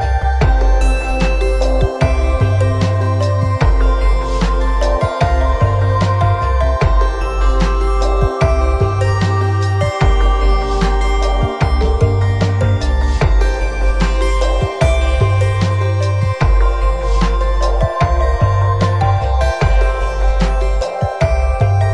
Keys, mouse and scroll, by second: 0.8-1.6 scroll down 4, 1.6 scroll up 1, 2.0 scroll down 1, 2.8 shift+middle click, 4.8 n, 5.7 click, 7.1 n, 8.5 click, 9.6 click, 11.9-12.2 scroll up 2, 13.3 scroll down 1.